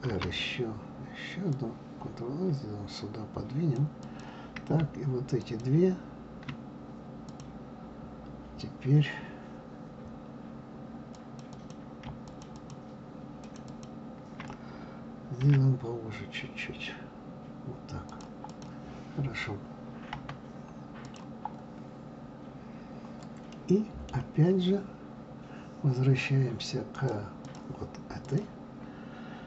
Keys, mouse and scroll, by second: 0.0 ctrl+r, 5.4 shift+click, 7.2 click, 11.1 click, 11.5 click, 12.3 shift+click, 12.5 shift+click, 13.4 shift+click, 13.7 shift+click, 15.4 s, 18.5 click, 20.1 KP_Divide, 21.0 click, 23.5-26.5 middle drag, 26.9-28.4 drag.